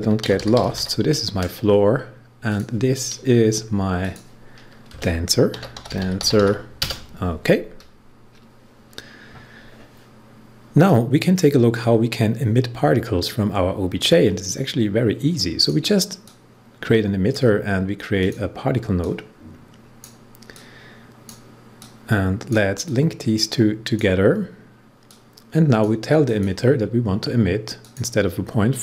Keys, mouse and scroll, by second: 0.0-1.2 typing, 2.4 click, 4.8 Return, 5.2-6.8 typing, 10.8-26.2 drag.